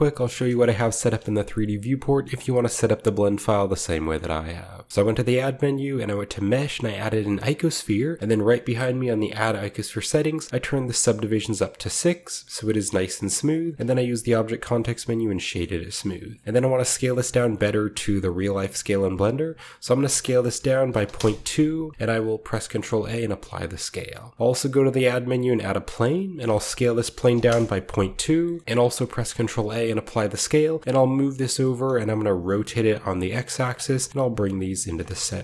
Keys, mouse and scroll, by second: 0.2-0.6 shift+scroll down 2, 0.5-1.3 shift+middle drag, 1.4-3.4 shift+middle drag, 3.9 shift+middle click, 4.1-6.8 shift+middle drag, 4.9 a, 7.4 click, 8.7 click, 10.1 click, 10.3 click, 10.6 click, 11.1 click, 12.0 click, 13.0-14.8 scroll down 2, 13.1 middle click, 13.7 w, 14.8 click, 16.3 click, 16.3 typing, 17.0-18.9 middle drag, 18.0 typing, 18.9-20.9 right drag, 20.0-22.4 typing, 21.1 Return, 21.7-23.0 scroll up 1, 23.0-23.4 scroll up 1, 23.4-25.0 drag, 24.3 shift+a, 25.5-25.8 shift+drag, 25.8-27.6 shift+scroll down 1, 26.4-28.0 typing, 28.3-28.6 scroll up 1, 28.4 ctrl+middle click, 29.0 ctrl+a, 29.9-33.2 ctrl+drag, 30.7 g, 31.6 r, 31.8 x, 33.3 shift+click, 33.6 shift+middle click, 34.0 g, 35.0 click, 35.1-35.4 middle drag.